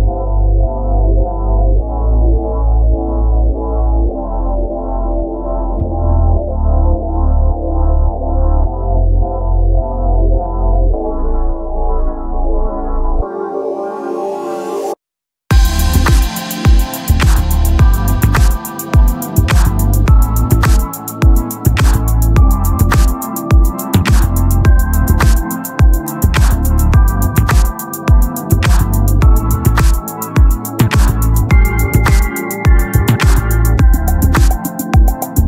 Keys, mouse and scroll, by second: 0.0-1.6 drag, 1.6-5.0 typing, 3.1 Tab, 3.1 click, 3.3 Tab, 4.0 click, 5.1 click, 8.6 Tab, 9.1-12.3 typing, 14.4 Tab, 15.2 click, 16.3 Tab, 16.8 r, 17.7 Tab, 18.3 e, 19.0 Tab, 19.3 z, 21.9 click, 22.5 click, 23.1 Tab, 23.6 z, 25.2 z, 26.3 Tab, 29.8 middle click, 30.6-34.8 right drag, 32.7-34.8 drag, 34.8-35.4 middle drag.